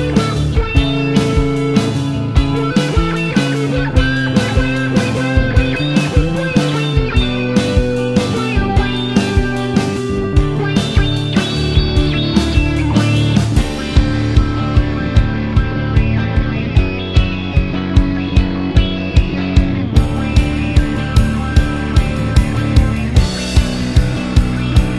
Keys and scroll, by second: 0.9 typing, 22.1 Right, 22.2 Right, 22.6 Left, 23.8 super+d.